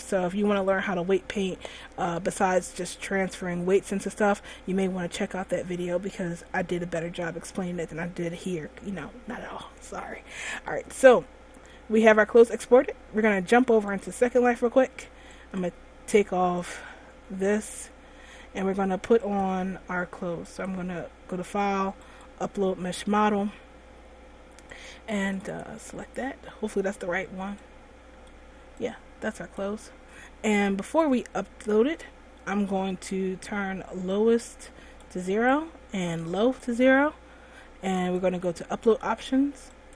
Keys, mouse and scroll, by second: 9.7-10.2 scroll down 1, 11.9 middle click, 12.4 middle click, 12.7 middle click.